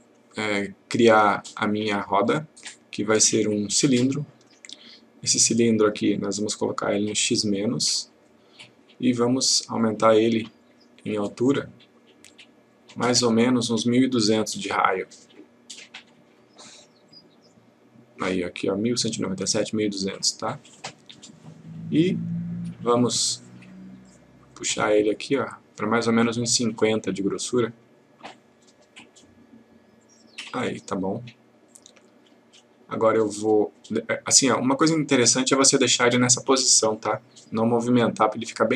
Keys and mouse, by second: 0.0 click, 2.2-4.4 click, 6.1 click, 9.8-11.0 click, 12.3-18.2 click, 21.1-23.0 click.